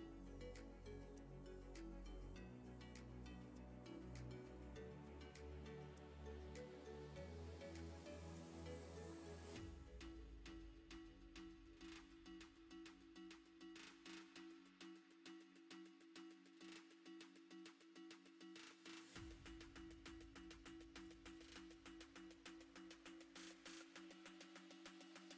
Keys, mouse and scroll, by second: 0.0 l, 0.2-1.6 middle drag, 1.6 r, 2.7 middle click, 3.4 r, 6.2-7.4 middle drag, 7.4 r, 8.0 middle click, 9.2-10.2 middle drag, 10.2 scroll up 2, 10.5 middle click, 11.3 e, 13.0 Tab, 13.7-15.1 right drag, 15.1 click, 15.4-15.9 middle drag, 17.1 middle drag, 17.4 Tab, 17.6-18.8 middle drag, 18.8 a, 18.9 a, 19.5 l, 20.3 Tab, 20.9 ctrl+i, 21.1 h, 21.2 Tab, 21.6 a, 21.8 a, 21.9 middle click, 22.3-22.9 scroll up 3, 22.6 shift+middle click, 22.9 middle click, 23.7 alt+click, 24.4 j.